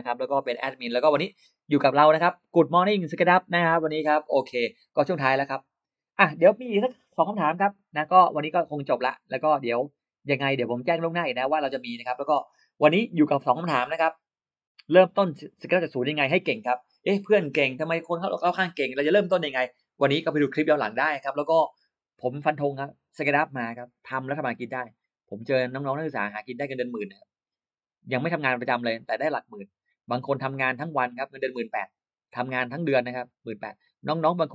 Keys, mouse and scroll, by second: 9.5-11.8 drag.